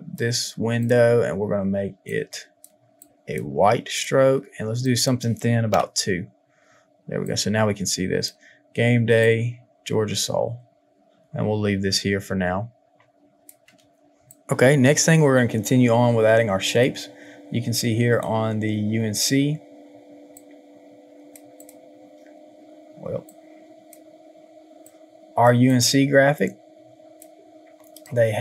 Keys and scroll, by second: 5.5 KP_2, 5.6 Return, 14.2 space.